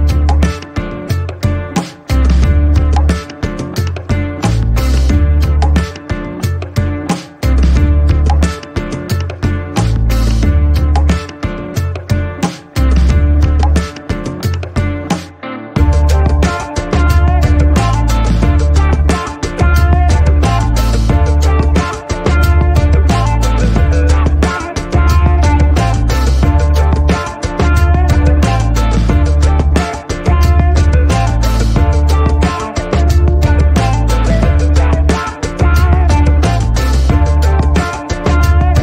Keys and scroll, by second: 29.2 g, 38.0 typing.